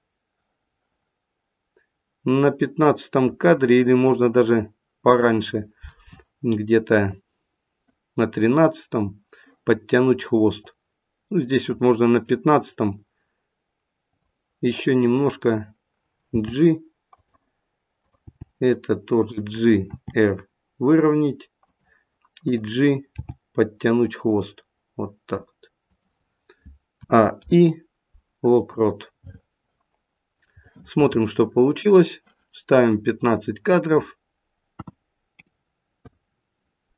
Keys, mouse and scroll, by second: 7.2 click, 10.7 click, 14.0 click, 16.3 g, 17.9 click, 18.3 g, 19.9 r, 22.4 click, 23.2 g, 27.0 a, 27.3 i, 30.4 click.